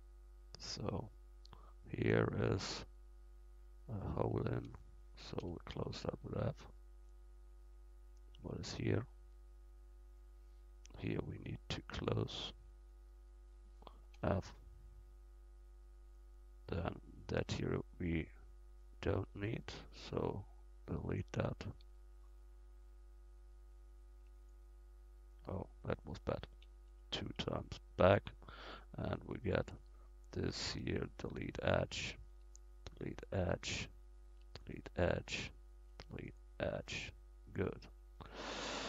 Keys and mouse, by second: 4.2-5.4 right drag, 5.4 f, 6.4 middle click, 6.9 middle click, 8.1 right click, 9.4 click, 12.3-14.9 middle drag, 14.2 f, 14.8 click, 15.2 click, 15.4 click, 17.3 right click, 17.9 click, 18.0 right click, 18.1 click, 18.5 right click, 18.6 click, 19.3 x, 21.9 x, 24.1 x, 26.4 ctrl+z, 26.7 ctrl+z, 26.9 ctrl+z, 27.4 ctrl+z, 30.6 x, 32.3 x, 34.3 x, 35.9 x.